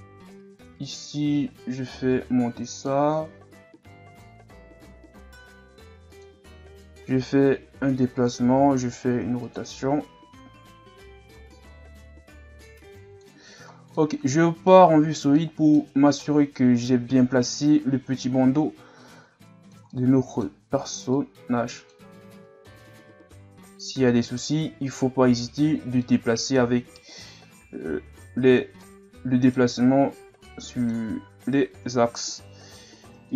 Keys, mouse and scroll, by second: 0.2 g, 1.3 s, 6.7 g, 8.5 r, 9.7 g, 13.4 z, 13.7 scroll down 3, 14.0-17.9 middle drag, 17.9-18.4 scroll up 2, 18.4 s, 19.9-21.1 middle drag, 21.1-24.1 drag, 24.1-27.1 middle drag, 27.1-28.9 drag, 28.9-32.4 middle drag, 32.4 ctrl+r.